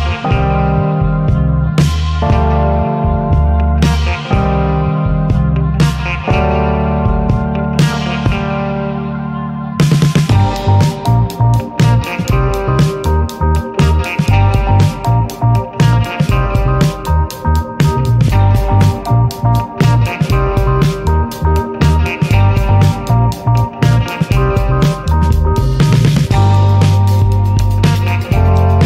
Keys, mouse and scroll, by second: 0.5 scroll up 1, 0.9 click, 2.0 ctrl+shift+click, 2.5 middle click, 2.7 scroll up 3, 3.3 ctrl+shift+click, 3.6 middle click, 3.8 ctrl+s, 4.0 scroll up 1, 4.5 click, 4.8 middle click, 5.0-5.4 scroll up 1, 5.4-6.5 drag, 8.5-10.5 drag, 14.9-16.2 drag, 19.9 scroll down 3, 20.2 scroll up 1, 21.5 scroll down 1, 22.3-23.0 scroll up 3, 23.0-23.8 middle drag, 23.8-25.6 drag, 26.0 middle click, 26.3 ctrl+s, 26.6 middle click, 26.8 scroll up 4, 26.9-28.7 middle drag, 28.7 ctrl+s.